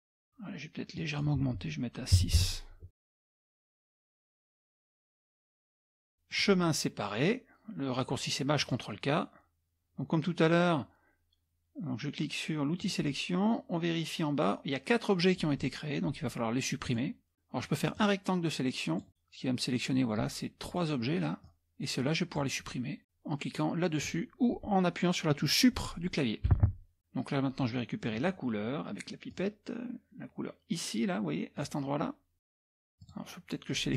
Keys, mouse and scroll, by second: 1.0 click, 2.2 KP_6, 2.4 KP_Enter, 3.1-5.6 drag, 6.3 click, 8.6 click, 12.8 click, 16.9 click, 18.0-19.1 drag, 21.4-22.5 drag, 26.5 Delete, 29.3 click, 31.6 click, 33.0 click, 33.7 click.